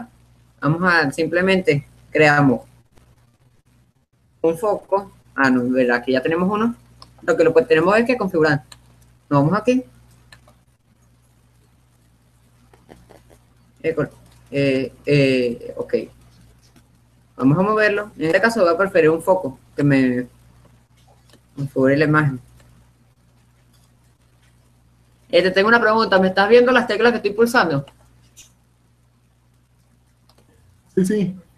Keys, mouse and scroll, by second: 0.0 F11, 0.0 click, 2.9 shift+click, 5.7 shift+a, 6.6-8.3 right drag, 9.2-12.0 drag, 18.9-23.2 drag, 23.2 middle click, 23.7-25.2 drag, 25.2-27.7 middle drag, 30.4-31.5 middle drag.